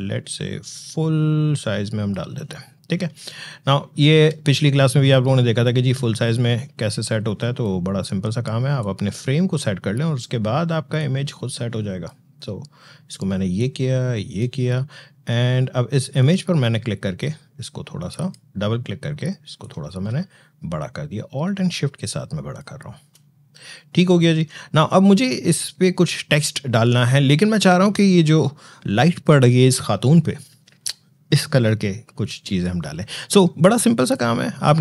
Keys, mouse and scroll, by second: 3.0 alt+scroll down 1, 4.4 click, 4.7 space, 5.7-23.7 drag, 23.7-24.2 alt+scroll up 1.